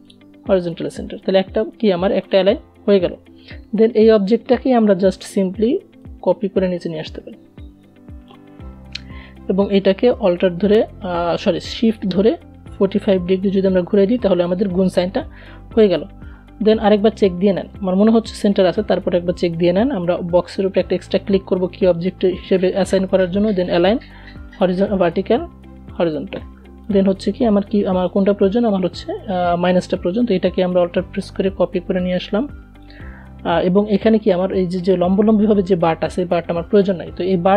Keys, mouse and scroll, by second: 4.4-7.2 alt+drag, 7.2-7.5 alt+scroll up 1, 10.3-16.0 shift+drag, 16.0-19.5 drag, 21.9 click, 29.0-32.3 alt+drag.